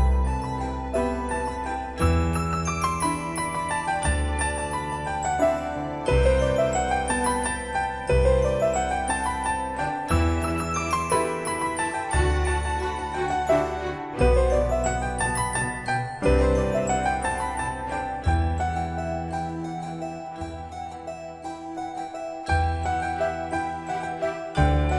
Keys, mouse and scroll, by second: 4.6-5.9 typing, 8.1 typing, 8.1 click, 13.3 4, 13.9 Return, 15.0 Escape, 16.3 scroll down 1, 17.1 middle click, 18.4-19.0 typing, 21.3 ctrl+s, 22.5 scroll up 1, 23.5-24.9 shift+middle drag.